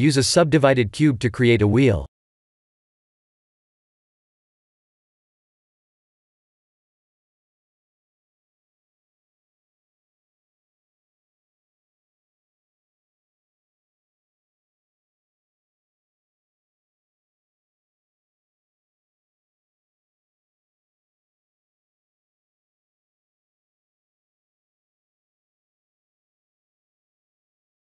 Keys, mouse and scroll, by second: 0.2 KP_1, 1.0 click, 1.3-1.6 scroll down 2, 1.7 shift+a, 7.4 g, 8.8 shift+z, 9.4 s, 11.5 ctrl+3, 12.6 middle click, 14.2 s, 16.8 Tab, 18.1 middle click, 19.8 scroll up 2, 20.2 shift+z, 20.5 middle click, 21.6 ctrl+r, 24.8 click, 25.4 click, 26.7 click.